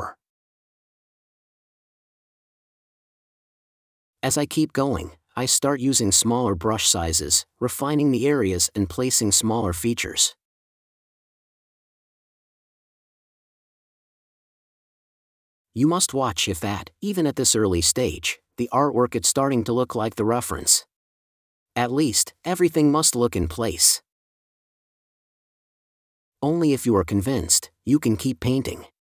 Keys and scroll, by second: 16.0 super+z, 16.5 4, 22.4 space.